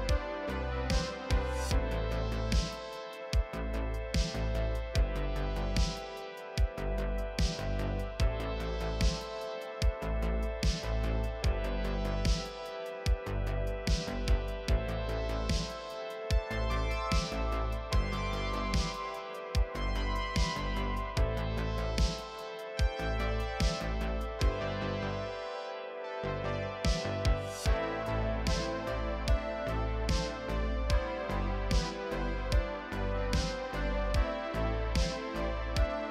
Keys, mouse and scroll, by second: 0.2 click, 0.3 KP_3, 0.4 scroll up 1, 0.5 scroll down 1, 0.6 KP_7, 0.7 click, 1.4 scroll up 2, 1.7 scroll down 2, 1.7 middle click, 1.8 scroll up 1, 1.9 Tab, 2.5-3.0 scroll down 13, 2.9 middle click, 2.9 alt+a, 3.0 middle click, 3.0-4.0 scroll up 6, 3.4 middle click, 3.6 click, 3.7 KP_3, 3.8 z, 3.8 shift+middle click, 4.2 middle click, 4.3 Tab, 4.3 shift+middle click, 4.4 scroll up 2, 4.4 3, 4.5 click, 4.6 KP_3, 5.2 scroll up 1, 6.2 KP_3, 6.4 g, 7.8 Tab, 8.0-9.2 drag, 9.2 scroll down 3, 9.2 middle click, 9.3-15.7 typing, 9.4 middle click, 9.5 scroll up 1, 9.5 middle click, 9.7 middle click, 10.7 middle click, 10.9 middle click, 11.0 middle click, 11.1 middle click, 11.3 shift+middle click, 11.3 Tab, 11.4 middle click, 11.5 Tab, 11.5 middle click, 11.6 ctrl+r, 11.9 middle click, 12.2 middle click, 12.2 scroll down 1, 13.0 middle click, 13.0 scroll up 1, 13.8 alt+a, 13.9 middle click, 14.1 middle click, 14.2-14.5 scroll down 2, 14.2 shift+middle click, 14.5 middle click, 14.5-15.0 scroll up 7, 14.6 click, 14.9 shift+middle click, 15.1 scroll down 1, 15.2 middle click, 15.2 scroll up 1, 15.4 middle click, 15.4 alt+a, 15.7 click, 16.0 middle click, 16.1 ctrl+z, 16.9 1, 16.9 middle click, 17.0 e, 17.1 scroll up 1, 17.2 ctrl+z, 17.5 KP_1, 18.4-18.8 scroll up 3, 18.6 click, 18.7 shift+middle click, 19.1 click, 19.4 shift+middle click, 19.4 scroll down 3, 19.4 scroll up 2, 19.5 shift+middle click, 20.3 scroll up 2, 20.3 shift+middle click, 20.8 scroll down 4, 20.8 shift+middle click, 20.9 alt+click, 21.0 shift+middle click, 21.3 middle click, 21.4 middle click, 21.5-22.8 typing, 21.6 middle click, 21.7 middle click, 21.8 shift+middle click, 21.9 middle click, 22.2-22.6 scroll down 4, 22.6 middle click, 22.8 middle click, 23.1 middle click, 23.2 scroll up 6, 23.2 shift+middle click, 23.3 middle click, 23.4 ctrl+r, 24.3 shift+middle click, 24.3-24.7 scroll up 2, 24.6 middle click, 25.2 z, 25.3 middle click, 25.6 z, 25.9 alt+a, 26.0 middle click, 26.0 scroll down 10, 26.1 shift+middle click, 26.1-26.6 scroll up 3, 26.4 shift+middle click, 26.5 middle click, 26.6 click, 26.8 middle click, 26.9 scroll down 1, 26.9 scroll up 2, 27.1 shift+middle click, 27.2 z, 27.3 g, 27.8 scroll down 1, 28.6 middle click, 28.9 scroll down 3, 28.9 middle click, 29.0-29.3 scroll up 3, 29.1 middle click, 29.3 middle click, 29.7 click, 30.2 middle click, 30.2 g, 30.6 scroll up 1, 30.7 scroll down 1, 30.7 middle click, 30.7 g, 31.3 middle click, 31.5-32.5 scroll up 4, 31.5 middle click, 31.6 alt+click, 31.7 middle click, 31.8-33.8 typing, 31.9 middle click, 32.5 middle click, 32.7 middle click, 33.1 ctrl+click, 33.2 scroll up 3, 33.4 shift+middle click, 33.5 middle click, 33.5 scroll down 4, 33.6 middle click, 33.8 middle click, 33.8-34.4 scroll up 1, 34.4 scroll down 1, 34.4 middle click, 34.6 scroll up 1, 34.6 middle click, 34.8 alt+click, 34.8 middle click, 34.8 scroll down 1, 35.0 scroll up 1, 35.1 shift+click, 35.2 shift+click, 35.3 KP_3, 35.3 scroll down 1, 35.4 shift+middle click, 35.4-36.1 scroll up 1.